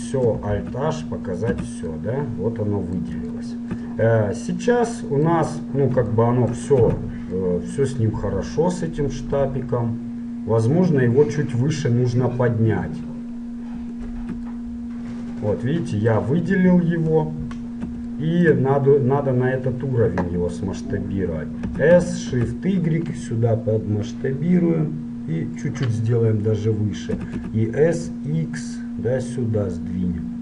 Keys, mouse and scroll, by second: 0.6 alt+h, 1.6 a, 2.0-6.4 middle drag, 7.0 z, 8.8-11.4 middle drag, 11.8-14.0 middle drag, 14.2 right click, 14.8-20.2 middle drag, 17.2 KP_1, 21.7 s, 26.2-30.2 middle drag, 27.3 s.